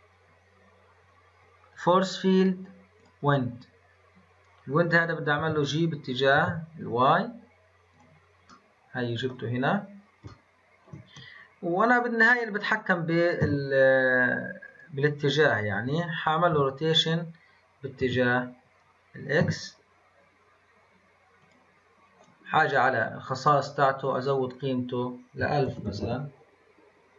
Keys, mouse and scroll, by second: 5.3 g, 8.4-9.5 middle drag, 9.5-10.2 scroll down 1, 10.2-13.4 shift+middle drag, 13.4 s, 16.5 r, 24.5-25.8 drag, 25.8 KP_0.